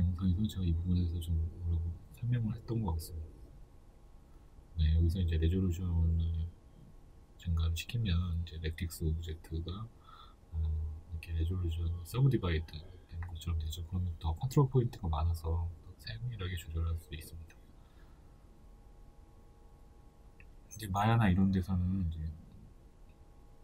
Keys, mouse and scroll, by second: 0.0-0.6 scroll down 2, 0.6-1.0 scroll up 2, 6.7-8.8 drag, 8.5 Return, 8.8-23.6 middle drag, 22.2-22.7 scroll up 2, 22.7-23.3 scroll down 2.